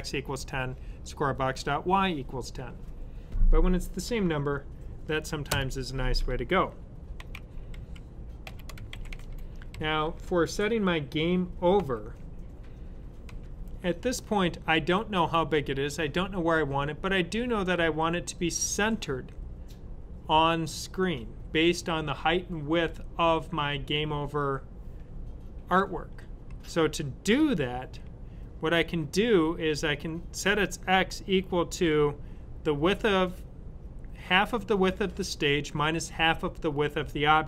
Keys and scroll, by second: 7.0 typing, 8.6-9.7 typing, 11.6 typing, 13.2 typing.